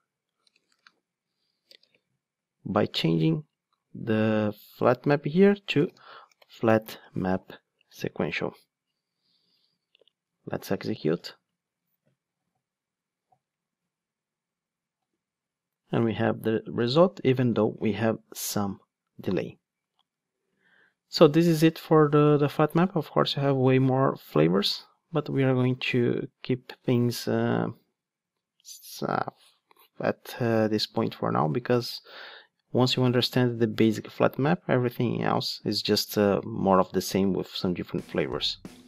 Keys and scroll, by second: 7.9 Return, 11.0 ctrl+shift+d.